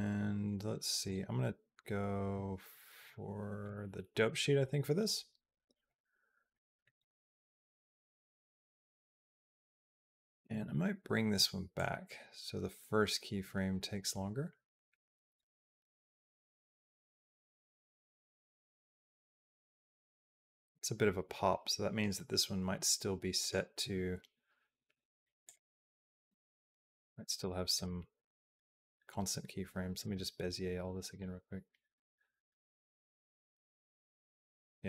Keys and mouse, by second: 0.9-3.5 drag, 4.1-5.7 drag, 6.3 middle click, 6.8 click, 7.4-9.5 drag, 9.9 click, 10.4 g, 11.6-15.3 drag, 15.6 click, 16.1 click, 16.4 g, 17.8-21.8 drag, 23.2-25.4 right drag, 26.1 b, 27.5-29.9 right drag, 31.0-34.8 drag.